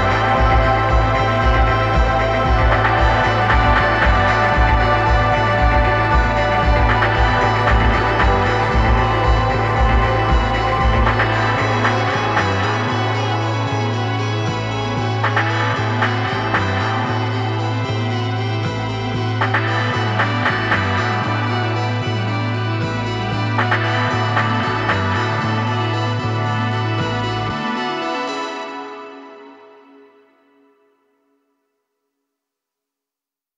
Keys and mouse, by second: 4.2-6.0 drag, 6.6-8.4 drag, 9.4-11.1 drag, 12.0-15.0 drag.